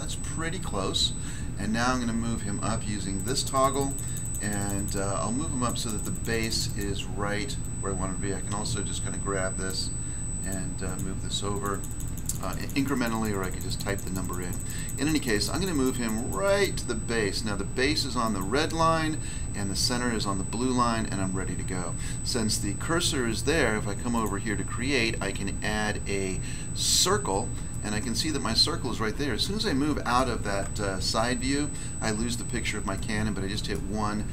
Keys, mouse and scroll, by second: 3.2 click, 3.3 click, 3.5 click, 3.6 click, 3.7 click, 3.8 click, 3.9 click, 4.0 double click, 4.2 double click, 4.3 double click, 4.4 double click, 4.6 double click, 4.6 double click, 4.7 double click, 4.9 double click, 5.6 double click, 5.7 click, 5.8 click, 5.9 click, 6.0 click, 6.5 double click, 6.6 double click, 6.7 double click, 7.6 double click, 9.6 double click, 10.4 click, 10.8 click, 10.9 click, 12.2 double click, 12.4 double click, 12.5 double click, 12.6 double click, 12.7 double click, 12.8 double click, 12.9 double click, 13.1 double click, 13.2 double click, 13.3 double click, 13.5 double click, 13.5 double click, 13.7 double click, 13.8 double click, 13.9 double click, 14.0 double click, 14.2 double click, 14.3 double click, 14.4 double click, 14.5 double click, 14.6 double click, 14.7 double click, 14.9 double click, 15.0 double click, 15.1 double click, 15.3 double click, 15.4 double click, 15.5 double click, 15.7 double click, 15.8 double click, 15.9 double click, 16.1 double click, 16.2 double click, 16.4 double click, 18.2 double click, 24.1 click, 26.9 click, 27.7 middle click, 30.1 middle click, 31.0 1, 33.7 middle click.